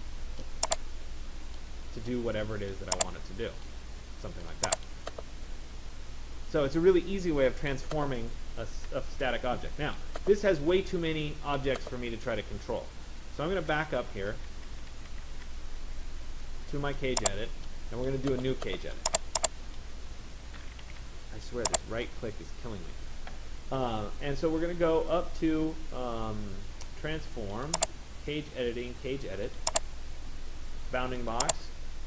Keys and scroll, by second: 13.4 ctrl+z, 20.4 Escape.